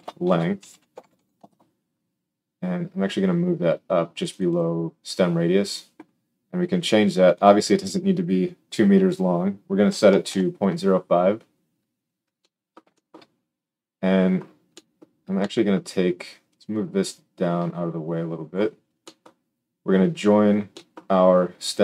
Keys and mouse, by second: 19.2-20.4 middle drag.